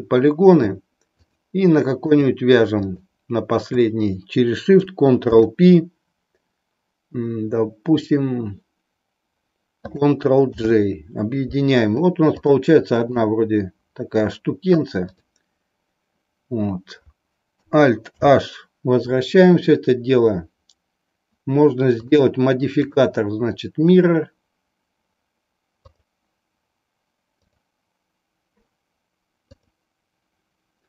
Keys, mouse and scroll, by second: 1.2 shift+click, 2.2 shift+click, 2.8 shift+click, 5.2 ctrl+p, 10.4 ctrl+j, 12.6 middle click, 15.0 click, 18.1 alt+h, 22.8-26.0 drag, 27.4 click.